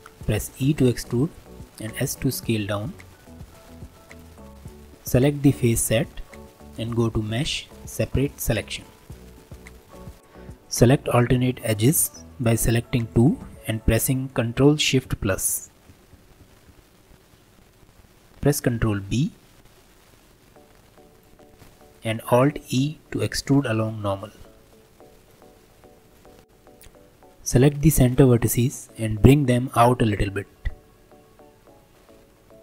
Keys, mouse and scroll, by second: 0.6 e, 4.4 middle click, 4.5 3, 5.3 alt+click, 6.1-7.3 middle drag, 7.3-9.0 drag, 9.0 Tab, 9.3 click, 9.7 click, 10.0 scroll up 2, 12.6 click, 13.1-14.5 shift+drag, 15.0 ctrl+KP_Add, 15.3 ctrl+KP_Add, 15.5 ctrl+KP_Add, 15.7 ctrl+KP_Add, 15.9 ctrl+KP_Add, 16.1 ctrl+KP_Add, 16.4 ctrl+KP_Add, 16.7 ctrl+KP_Add, 19.0 ctrl+b, 21.5-22.7 middle drag, 22.7 alt+e, 25.8 Tab, 26.0 click, 26.4-27.5 scroll up 3, 27.5 click, 28.3 scroll down 1, 28.5-30.5 middle drag, 30.5 g.